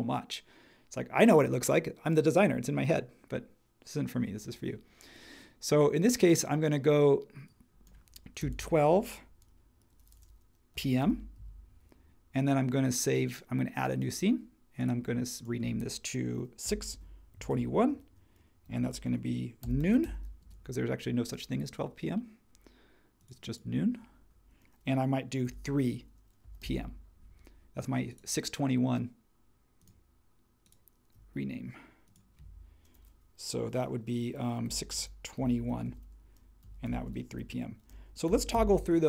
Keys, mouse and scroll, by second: 8.1-9.0 typing, 10.5-11.4 typing, 16.4-17.3 typing, 18.4-20.5 typing, 25.4-27.1 typing, 34.4-38.8 typing.